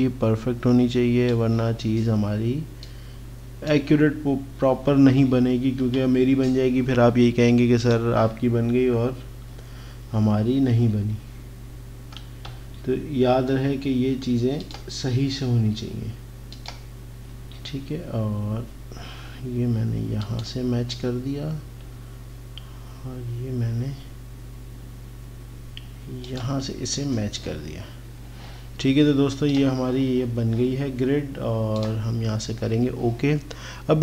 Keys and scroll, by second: 12.6 x.